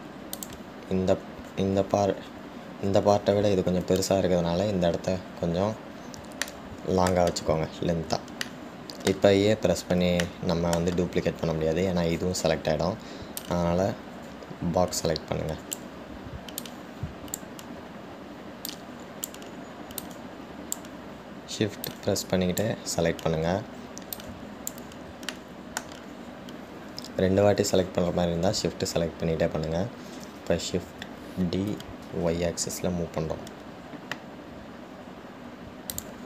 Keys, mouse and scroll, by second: 7.7-10.5 shift+middle drag, 10.5-11.5 scroll down 1, 11.5 shift+middle click, 12.2-13.7 scroll down 1, 13.7 scroll down 1, 13.8-14.6 scroll up 1, 14.6 click, 16.4 click, 17.8 click, 19.9 shift+click, 21.2 shift+click, 23.0 shift+click, 25.4 shift+click, 26.6 shift+middle click, 27.1-27.7 shift+scroll up 1.